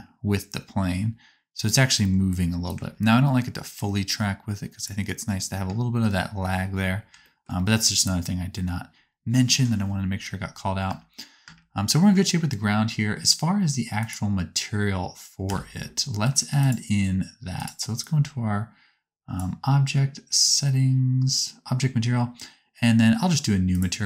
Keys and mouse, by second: 4.2-8.2 ctrl+middle drag, 7.4-10.6 drag, 7.4 right click, 11.0 space, 11.4 space, 12.0 space, 14.0-16.7 drag, 14.0-16.7 right drag, 17.6-24.0 drag, 17.6-24.0 right drag.